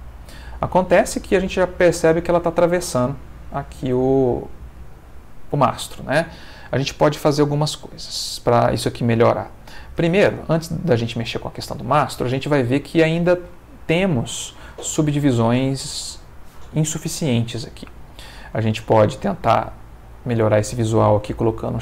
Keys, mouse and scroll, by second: 2.8-5.0 middle drag, 5.4 Escape, 10.3 space, 13.5 ctrl+middle click, 18.8 right click, 20.0 click, 21.6 middle click.